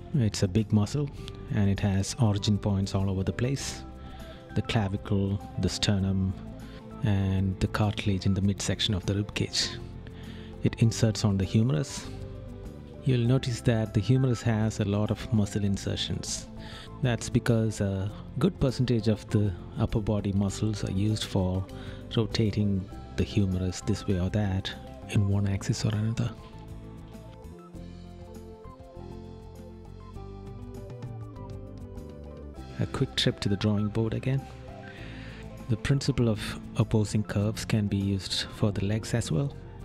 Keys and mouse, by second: 2.8 right click, 9.2 right click, 24.6 right click.